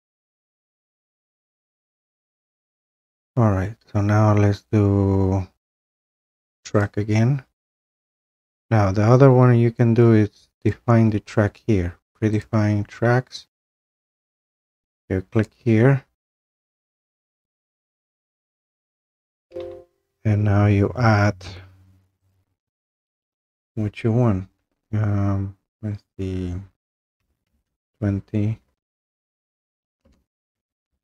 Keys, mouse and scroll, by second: 0.7 click, 1.1 Delete, 2.0 click, 2.3 Delete, 6.8 click, 10.7 click, 12.4 click, 15.4 click, 22.3 click, 26.9-27.9 typing, 30.0-31.0 typing.